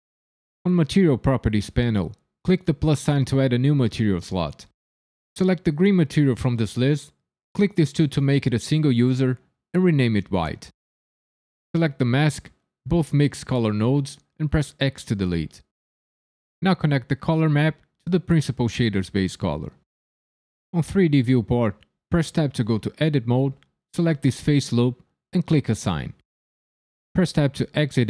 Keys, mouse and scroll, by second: 0.6 click, 3.0 click, 4.6 click, 7.4 click, 8.2 click, 12.4 click, 13.1 shift+click, 13.7 shift+click, 14.8 x, 17.4 click, 22.3 Tab, 23.2 3, 24.7 alt+click, 25.8 click, 27.3 Tab.